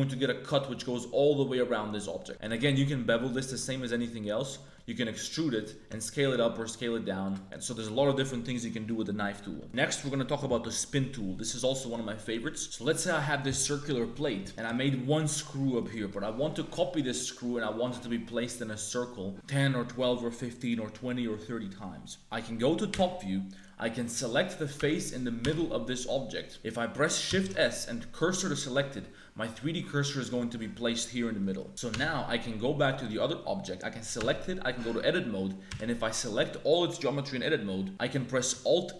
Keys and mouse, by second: 2.3 ctrl+b, 2.4 ctrl+b, 4.6 click, 5.0 e, 6.0 s, 7.4 Tab, 7.4 click, 9.5 Tab, 12.6 a, 14.6 g, 16.1 middle click, 16.3 middle click, 22.8 KP_7, 24.0 click, 24.7 Tab, 25.4 3, 27.2 shift+s, 31.5 shift+click, 31.9 Tab, 32.9 click, 34.1 Tab, 35.6 a.